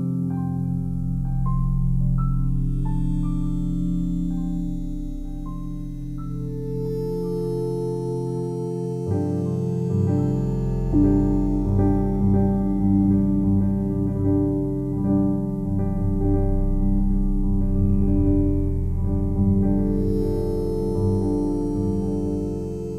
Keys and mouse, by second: 0.8-5.0 alt+drag, 5.5 typing, 6.0-7.9 alt+shift+drag, 8.1-9.2 alt+drag, 8.1 typing, 10.1 click, 11.1 typing, 12.0 ctrl+alt+click, 12.6-14.6 alt+shift+drag, 14.6-14.9 typing, 16.8-18.8 drag, 19.4-22.7 alt+drag.